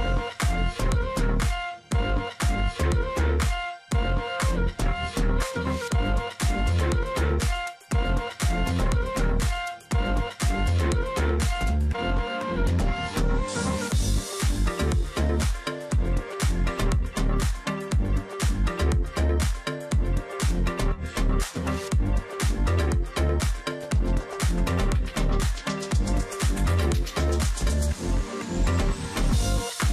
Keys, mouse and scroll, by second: 0.1 space, 0.8 ctrl+click, 1.1-1.6 alt+scroll up 1, 1.8 double click, 3.0-3.5 alt+scroll up 1, 4.1 double click, 5.0 ctrl+click, 7.3 ctrl+click, 7.6-8.3 alt+scroll down 1, 10.0 double click, 11.0 ctrl+click, 11.2-11.6 alt+scroll down 1, 11.6 space, 11.9-12.3 alt+scroll up 1, 13.1 ctrl+click, 13.3-13.7 alt+scroll up 1, 13.7 space, 14.6 alt+scroll up 1, 15.4 space, 16.9 space, 18.4 ctrl+click, 19.1-19.4 alt+scroll down 1, 19.4 space, 20.0 ctrl+click, 20.2 alt+scroll up 1, 20.6 space, 21.5-22.0 alt+scroll up 1, 22.2-22.7 alt+scroll up 1, 23.8 alt+click, 24.9 space, 26.6 space, 26.8 ctrl+z, 28.4 alt+click, 28.5 space, 28.8 ctrl+z.